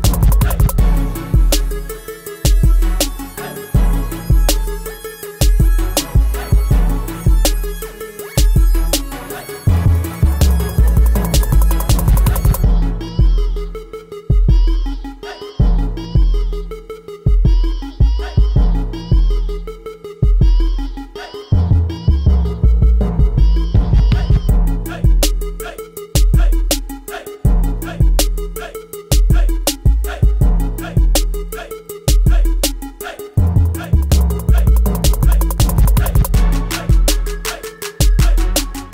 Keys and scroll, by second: 6.8 t, 7.5 ctrl+a, 7.8-9.2 typing, 9.9 Return, 10.5 o, 11.7 ctrl+a, 22.9 t, 23.5 ctrl+a, 24.2 ctrl+t, 33.5 ctrl+a, 34.3 alt+Up, 35.5 alt+Down.